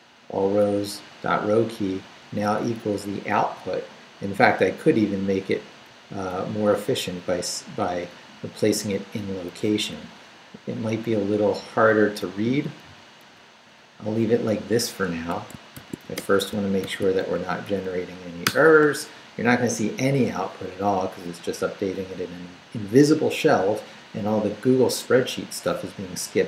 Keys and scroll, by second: 0.9 Left, 2.0 Right, 3.6 Left, 5.5 Up, 5.9 Left, 12.3 Down, 13.8 Up, 15.1 Escape, 15.7 shift+;, 16.0 shift+w, 16.2 Return, 16.8 shift+;, 17.3 shift+Up, 18.4 Return.